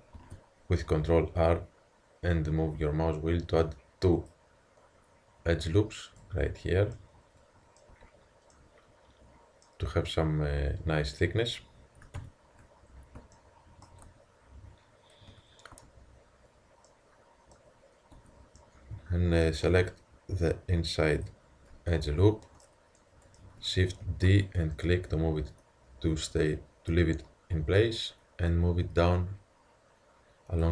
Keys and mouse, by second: 0.2 ctrl+r, 7.0-11.1 middle drag, 7.9 Tab, 12.2 ctrl+KP_3, 13.4 middle click, 14.1 Tab, 15.4 a, 16.3 Tab, 18.2 Tab, 21.2-22.1 drag, 22.1-23.0 middle drag, 24.0 shift+d, 28.5-30.4 drag.